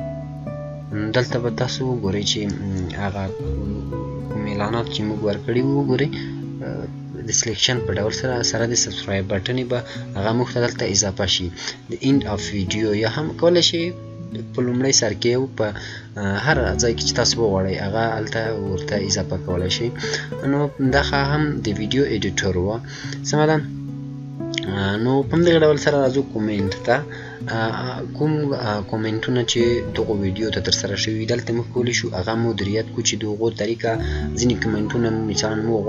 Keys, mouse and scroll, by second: 18.8 scroll down 1, 25.2 scroll down 1, 25.3 click, 31.2 click, 31.2-33.2 scroll down 1.